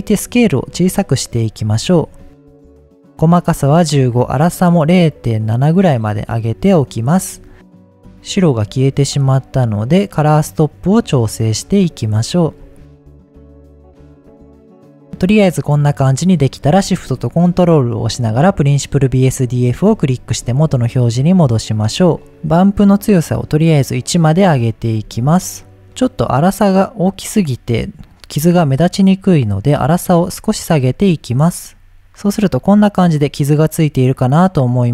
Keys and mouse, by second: 0.1 click, 1.1-3.0 drag, 3.2 click, 4.3-6.7 drag, 7.9 click, 8.1-11.5 drag, 12.6-14.5 shift+drag, 15.0-16.8 shift+middle drag, 18.5 ctrl+shift+click, 20.0-20.3 shift+middle drag, 21.2-21.8 middle drag, 22.9 click, 24.7-25.0 shift+middle drag, 25.8 middle click, 27.6 middle click, 29.5-31.6 drag, 34.6 middle click.